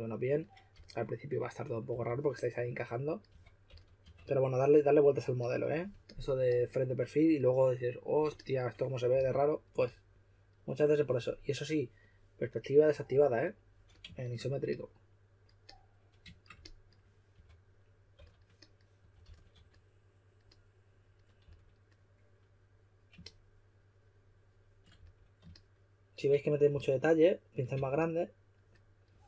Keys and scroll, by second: 0.7-4.5 typing, 9.1-10.2 typing, 17.3-20.0 typing, 21.4 typing, 24.9 shift+s, 26.7-28.2 typing.